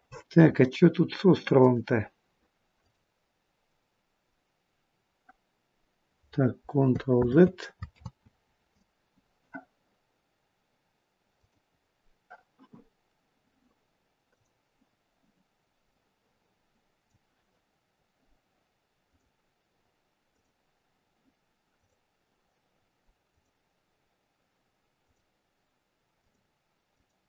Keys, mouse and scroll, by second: 1.4 click, 7.3 ctrl+z, 8.0 ctrl+z, 11.2 click, 14.2 click, 18.9 click, 20.3 click.